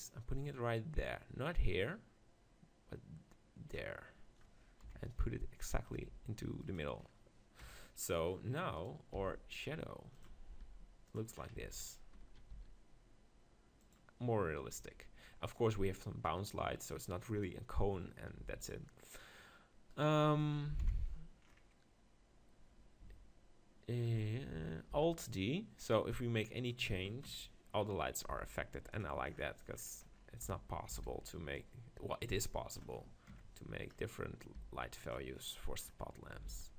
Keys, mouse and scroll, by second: 4.8 KP_7, 5.9 g, 6.8 click, 7.6 KP_1, 8.8-10.6 right drag, 9.3 g, 10.2-12.9 drag, 10.6 g, 11.6 Tab, 12.5 s, 12.9 middle click, 13.9-15.6 drag, 15.0 Tab, 18.4 x, 19.9-21.7 right drag, 20.8 KP_7, 21.7-23.5 middle drag, 24.9 alt+d, 26.7-28.5 drag, 28.3 g, 29.0-30.7 drag, 31.0 alt+d, 31.1-33.0 right drag, 31.6-33.4 drag, 33.9 middle click, 34.6 g, 35.4-36.5 middle drag, 36.5 alt+d.